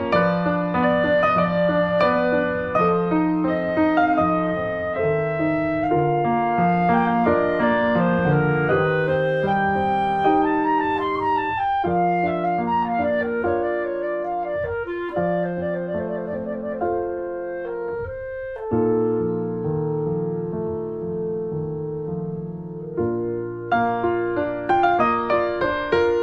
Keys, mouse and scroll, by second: 1.1 shift+middle click, 2.0 click, 2.7 middle click, 3.3 click, 4.2 scroll down 4, 4.3 shift+middle click, 5.2-5.6 scroll down 2, 5.6 click, 5.7-6.9 scroll up 6, 5.8 shift+middle click, 6.3 shift+middle click, 6.6 shift+middle click, 7.0 f, 7.5 click, 8.1 scroll up 2, 8.3 shift+middle click, 8.5 ctrl+z, 8.8 f, 10.0 right click, 10.3-11.3 drag, 11.3 scroll down 2, 11.4 shift+middle click, 11.7-12.2 scroll up 3, 11.9 middle click, 12.0 shift+middle click, 12.2 middle click, 12.5 click, 13.3 scroll down 1, 13.4 middle click, 14.0 scroll up 2, 14.1 middle click, 14.7 click, 14.8 middle click, 14.9 scroll up 1, 15.0 shift+middle click, 15.3 click, 15.7 ctrl+z, 15.9-19.8 drag, 19.8 scroll down 2, 20.0 middle click, 20.9 middle click, 21.0 click, 21.1-23.4 shift+middle drag, 23.4 ctrl+s, 23.5 middle click, 23.7 click, 24.1 shift+middle click, 24.7 click, 24.9 click, 25.2-26.2 middle drag.